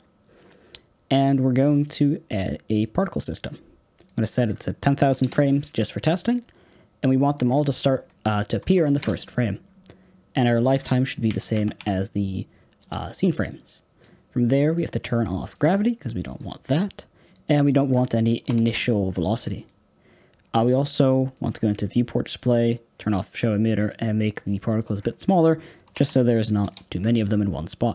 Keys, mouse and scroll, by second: 2.9-23.1 drag, 26.6 KP_0, 27.2-27.5 scroll up 3, 27.5 middle click.